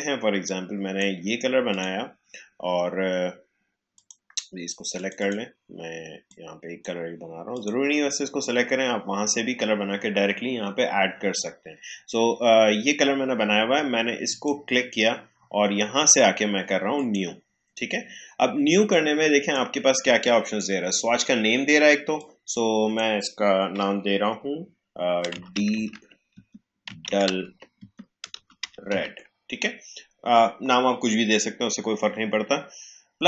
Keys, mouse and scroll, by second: 14.2-25.3 drag, 25.3 shift+d, 28.6 e, 30.7-31.5 typing.